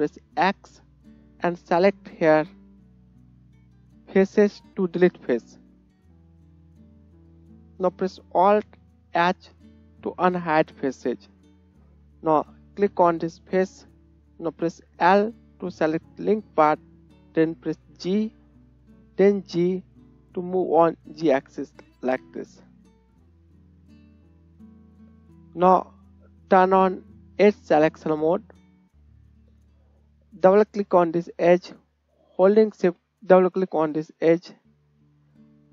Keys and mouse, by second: 0.6 x, 8.3 alt+click, 9.0 alt+right click, 9.4 alt+h, 9.7 click, 10.5-28.5 right drag, 15.0 l, 17.9 g, 28.3 click, 28.3 middle click, 30.7 click, 30.9-33.2 drag, 33.3 shift+click, 34.9 click.